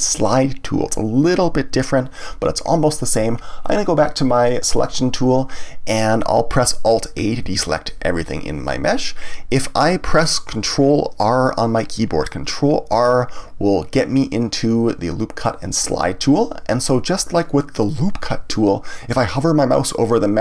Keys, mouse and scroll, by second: 4.7 click, 7.4 alt+a, 12.9 ctrl+r.